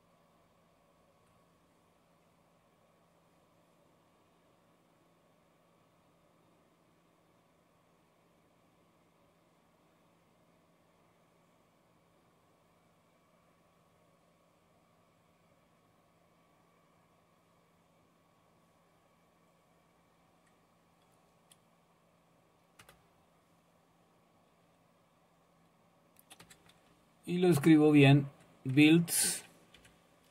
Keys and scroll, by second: 22.8 Return, 26.4 Up, 26.9 Left, 27.4 Left, 29.8 i.